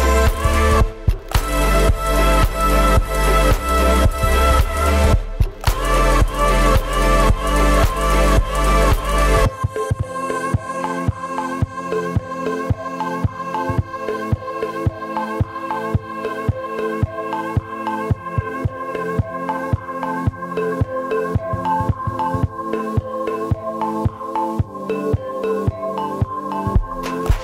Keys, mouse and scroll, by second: 1.4 s, 1.9 right click, 2.7-3.3 scroll down 1, 3.4 right click, 3.5 Tab, 3.7 right click, 3.9 shift+d, 6.3 Tab, 6.4 scroll up 4, 6.6 right click, 6.9 Tab, 7.1 right drag, 7.3 g, 9.0 Tab, 9.3 right click, 9.4 scroll down 1, 9.5 middle click, 9.6 scroll up 7, 9.9 scroll down 1, 10.0 shift+middle click, 10.3 right click, 10.5 s, 11.8 click, 12.1 s, 13.8 w, 17.4 right click, 18.2 shift+d, 24.1 s, 24.9 right click, 25.2 shift+d.